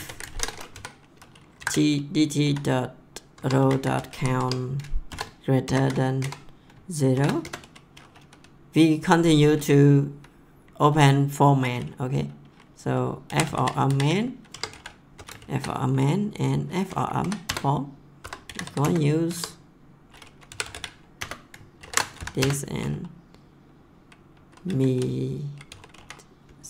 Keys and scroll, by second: 0.0-0.7 typing, 1.6 ctrl+v, 2.4-5.6 typing, 3.3 Tab, 6.1 Right, 7.1 shift+[, 7.4 Return, 13.0-15.3 typing, 17.2 Down, 17.4 Return, 18.0-19.1 typing, 19.3 Tab, 20.3-22.2 typing, 22.4 Return, 24.7-26.5 typing.